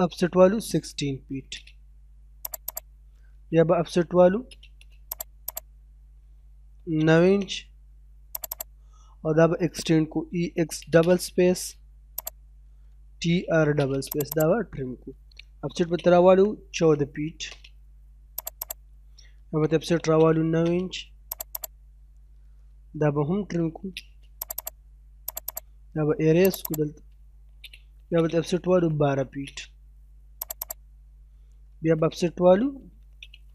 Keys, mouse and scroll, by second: 0.3 1, 1.5 space, 2.5 click, 4.4 space, 5.3 click, 6.7 o, 6.9 space, 7.1 9, 7.3 space, 8.3 click, 8.9 middle click, 10.2-10.7 typing, 12.2 click, 13.1-14.0 typing, 14.2 click, 15.7 o, 15.8 space, 16.2 1, 17.4 space, 18.4 click, 19.9 o, 20.0 space, 20.3 9, 20.5 space, 21.4 click, 21.9 middle click, 23.5 t, 23.8 space, 24.1-24.4 scroll up 1, 24.4 click, 24.9-25.3 scroll down 1, 25.3 click, 26.2 scroll up 1, 26.5 click, 27.1-29.3 typing, 30.4 click, 30.9 middle click, 32.8 o, 33.0 space, 33.4 9.